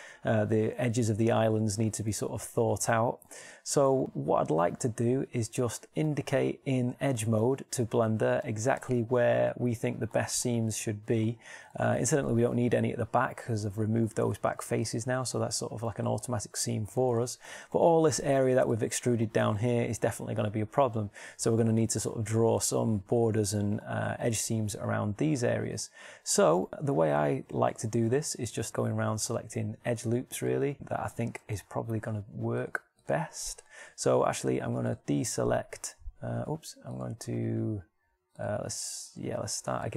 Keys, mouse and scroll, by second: 16.7 shift+middle click, 28.7-29.9 middle drag.